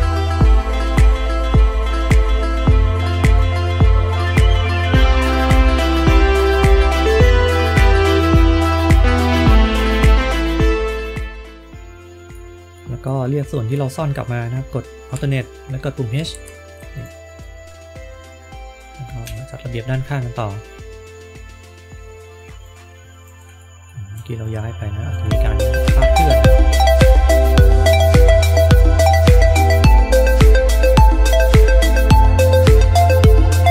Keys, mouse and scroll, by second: 0.2 shift+middle click, 0.7 scroll up 1, 0.8 click, 1.7 click, 1.8-2.1 scroll down 3, 4.3 click, 4.9 click, 6.3 click, 7.0 click, 7.5 click, 8.0 middle click, 8.8 middle click, 9.0 KP_1, 9.5 click, 9.5 scroll up 2, 9.8 click, 10.2 click, 10.8-11.3 scroll down 2, 11.6 middle click, 12.7 middle click, 16.1 alt+h, 16.9 click, 17.2-19.1 scroll up 2, 19.1 KP_3, 20.4 scroll up 3, 21.9-22.2 scroll up 4, 22.5 click, 23.5 shift+middle click, 24.3 click, 25.3 shift+middle click, 26.1 click, 27.2 shift+middle click, 28.0 click, 28.7 shift+middle click, 29.4 click, 30.3 shift+middle click, 30.6 click, 30.9 space, 31.1 click, 31.2 shift+middle click, 31.6 click, 32.1 scroll down 1, 32.2 shift+middle click, 32.4 click, 32.6 shift+middle click, 32.8 click, 33.1 shift+middle click, 33.3 click.